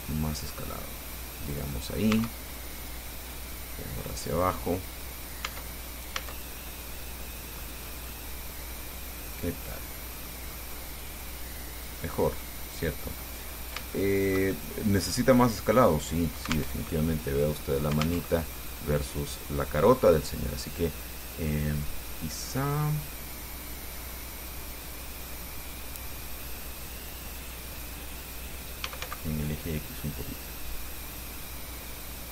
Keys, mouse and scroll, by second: 2.4 Tab, 3.7-4.9 drag, 5.3 scroll down 2, 5.7 Tab, 6.1-6.4 scroll down 1, 6.4 Tab, 6.9 scroll down 1, 7.5 click, 8.1 scroll up 1, 8.3-10.7 drag, 10.7 middle click, 11.0 scroll up 1, 11.5 click, 12.5-13.7 drag, 13.8 scroll up 2, 14.2-15.5 shift+drag, 15.6 scroll down 2, 17.0 alt+Tab, 18.5 alt+Tab, 20.2-20.7 scroll up 2, 22.4-27.9 drag, 28.8-29.7 typing, 32.0 click.